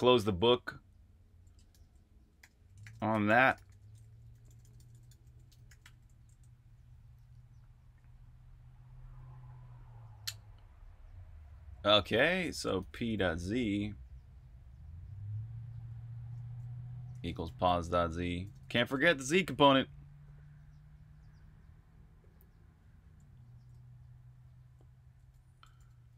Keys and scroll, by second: 1.4-6.2 typing, 7.7 l, 11.9-13.6 typing, 15.7 typing, 16.8-19.2 typing, 23.5-25.7 typing.